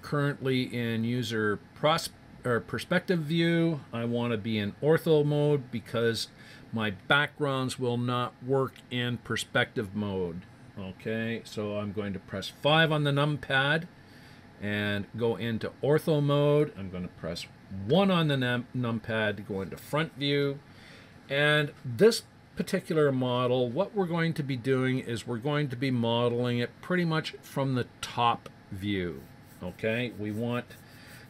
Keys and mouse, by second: 12.6 KP_5, 17.8 KP_1.